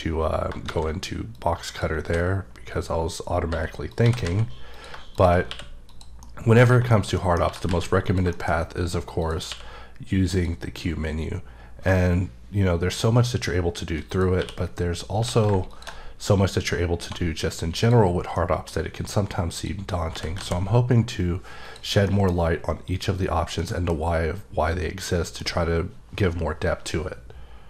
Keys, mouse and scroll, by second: 0.6 shift+a, 1.4 click, 2.1 d, 3.9 click, 4.0 g, 4.2 z, 4.7 click, 5.5 q, 5.9 click, 6.5 middle click, 7.5 g, 7.7 z, 8.0 click, 8.3 shift+middle click, 8.5 shift+scroll up 3, 9.2 click, 10.3 click, 12.1 shift+scroll down 1, 12.8-14.0 shift+scroll up 2, 14.1 click, 14.4 q, 15.2 q, 15.7 ctrl+shift+click, 17.0 1, 17.8 click, 18.1 scroll down 3, 18.3 middle click, 19.6 click, 20.1 g, 20.4 z, 21.7 click, 22.1 middle click, 23.6 middle click, 24.2 scroll down 2, 25.1 middle click.